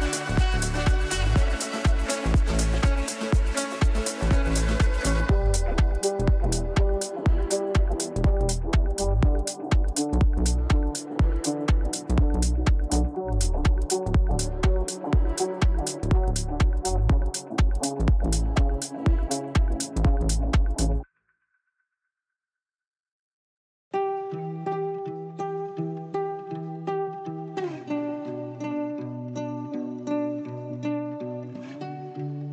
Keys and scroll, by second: 12.0 ctrl+r, 31.2 Down, 32.3 Right.